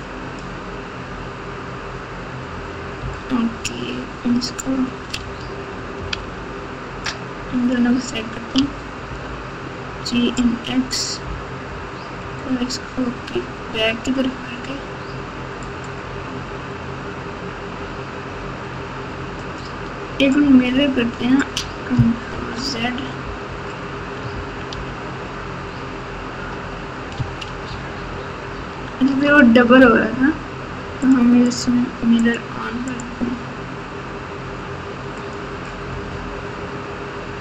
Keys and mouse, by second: 0.0 click, 3.0 Tab, 5.2 alt+z, 6.1 alt+z, 7.3 click, 8.5 g, 19.4 click, 22.3 ctrl+z, 24.7 ctrl+z, 27.6 ctrl+shift+z, 28.5 ctrl+shift+z, 32.2 click, 32.9-35.3 drag.